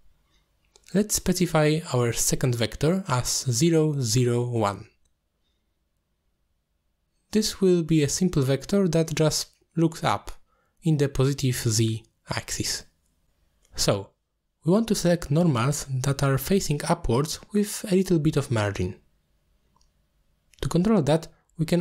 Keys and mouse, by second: 1.3 middle click, 3.1 click, 5.0-6.7 drag, 7.2 click, 8.0 click, 8.5 g, 9.4 click, 10.8 middle click, 16.6-17.4 middle drag, 18.8 middle click, 19.8-21.4 middle drag.